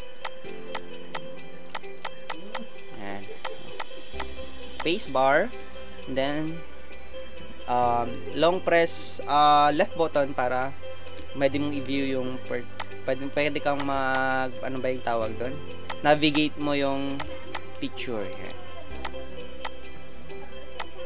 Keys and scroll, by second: 4.4 space.